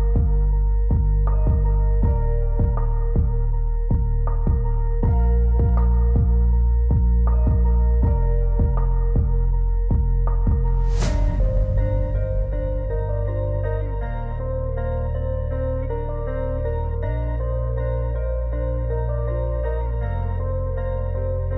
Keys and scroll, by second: 6.4 F4, 13.3 alt+w.